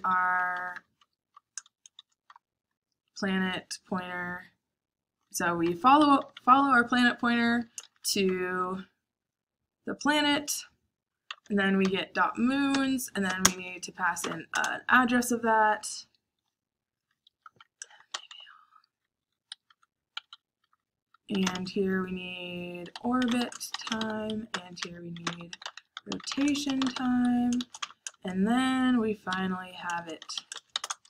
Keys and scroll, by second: 0.0-2.7 typing, 5.9 Escape, 6.1-8.5 typing, 9.9 typing, 11.0-14.2 typing, 14.5 Return, 17.2-25.3 typing, 27.3-28.0 typing, 29.2 Escape, 29.2-31.0 typing.